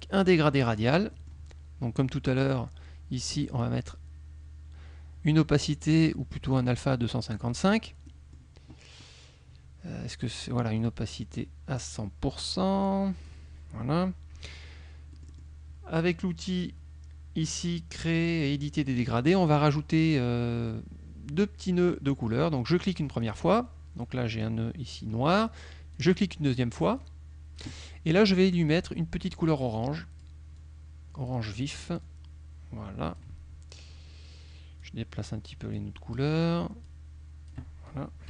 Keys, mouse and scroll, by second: 0.7 click, 1.2 middle click, 2.5 click, 3.4 click, 6.5-7.6 drag, 8.1 middle click, 11.3 click, 12.6 click, 15.3 middle click, 18.9 click, 19.6 click, 23.3 click, 24.5 click, 26.0 click, 27.1 click, 28.6 click, 29.3-30.5 drag, 30.7 click, 32.1-33.5 drag, 34.9 click, 35.8 click, 36.9 click.